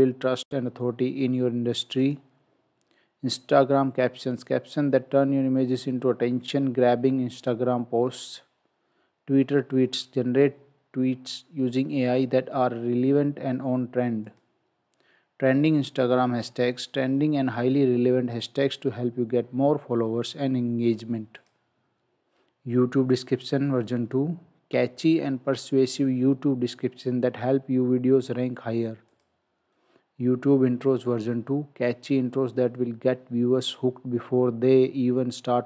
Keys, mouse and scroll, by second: 10.3 click, 14.3 click, 21.4 click, 29.1 click.